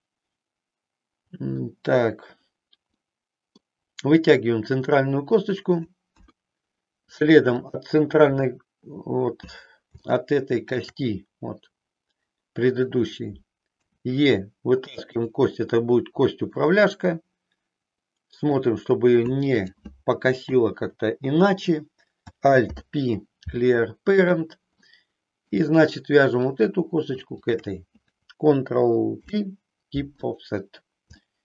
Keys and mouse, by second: 2.9 middle click, 6.1 KP_1, 10.1 shift+middle click, 13.8 e, 16.7-18.5 middle drag, 19.5 click, 22.5 alt+p, 24.8 middle click, 26.4 click, 27.3 shift+click, 29.1 ctrl+p, 31.3 shift+middle click.